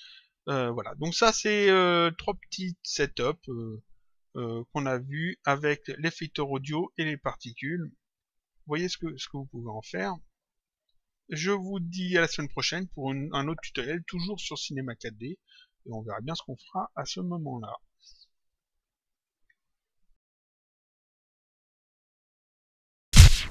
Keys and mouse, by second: 2.2 click, 6.9 click, 8.6 click, 9.8 click, 11.9 click, 20.1 click.